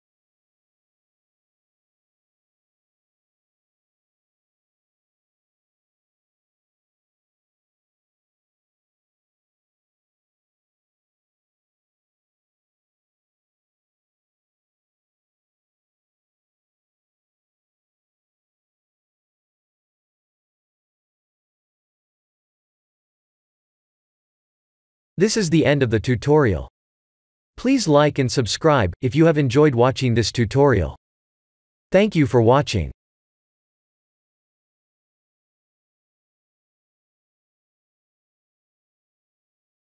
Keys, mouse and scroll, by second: 1.5 click, 2.5 Tab, 2.8 click, 3.2 Tab, 3.7 click, 4.9 click, 5.7 click, 6.0 Tab, 6.4 click, 6.7 shift+z, 7.5 shift+z, 8.2 click, 10.2 click, 16.8 click, 17.8 click, 18.3 ctrl+s, 22.3 click.